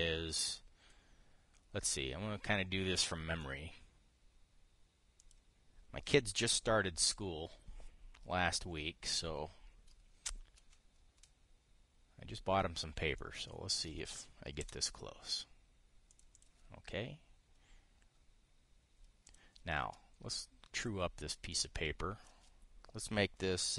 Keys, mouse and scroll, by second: 0.4 click, 5.9 click, 13.9 ctrl+click, 15.3 Return, 16.8 click, 20.0 click, 22.2 click.